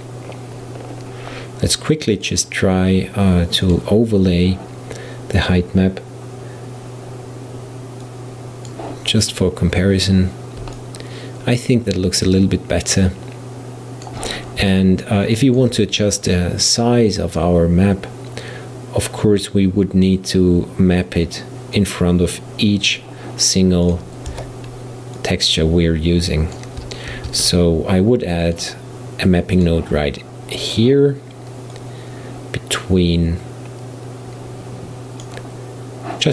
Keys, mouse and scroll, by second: 0.0-0.5 scroll down 4, 0.8-2.3 scroll up 4, 2.3-5.3 drag, 8.1-9.4 drag, 9.4-10.0 scroll up 3, 10.0-10.8 scroll down 1, 10.8-13.8 middle drag, 14.8-17.8 shift+middle drag, 21.8-24.0 drag, 24.3 Tab, 25.2 click, 27.1 shift+a, 31.8 click.